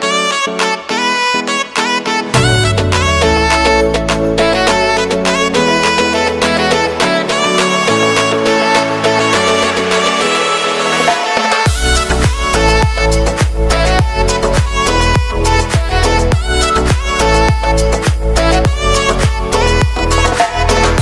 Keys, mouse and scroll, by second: 0.3 alt+click, 1.2 g, 4.4-5.6 shift+middle drag, 5.6 f, 6.5 ctrl+b, 10.9-13.3 shift+middle drag, 13.3 ctrl+r, 16.6 ctrl+r, 18.6 scroll up 3, 18.8-19.6 scroll down 2, 19.6 alt+click, 20.2 alt+click.